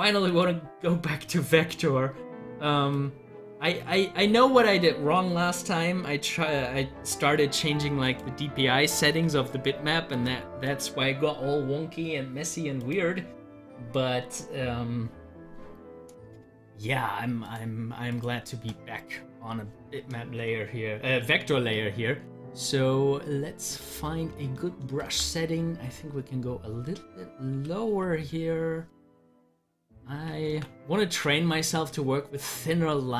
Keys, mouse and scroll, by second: 0.3 click, 2.9-6.1 drag, 8.0 click, 10.1 click, 17.5 click, 22.5-25.0 drag, 25.0 ctrl+z, 27.5 2, 28.2-30.5 drag, 30.5 ctrl+z.